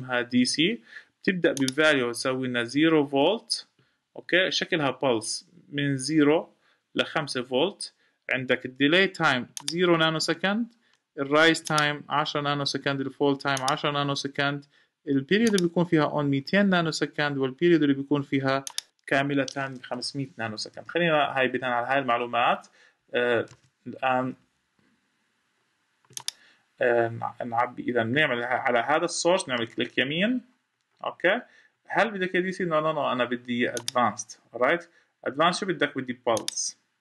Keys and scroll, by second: 20.5 Escape, 23.3 Escape.